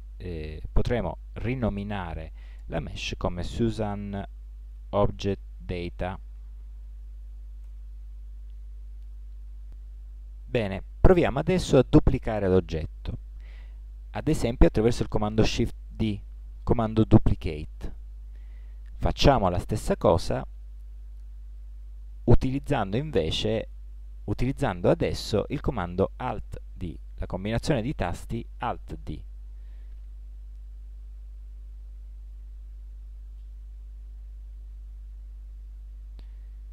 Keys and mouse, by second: 11.2 middle click, 13.3 shift+d, 19.5-21.0 drag, 29.0 alt+d.